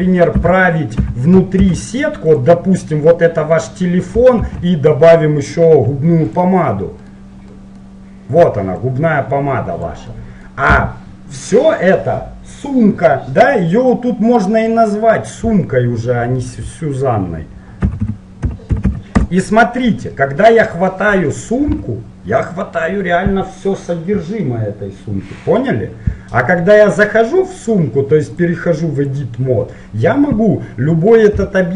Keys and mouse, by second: 0.4 a, 1.4 middle click, 1.8 shift+d, 3.8-4.9 middle drag, 4.6 shift+a, 6.4 middle click, 7.7 middle click, 9.0-12.2 drag, 10.9 Tab, 14.5-16.6 drag, 21.9 g, 29.1-30.5 drag, 31.5 g.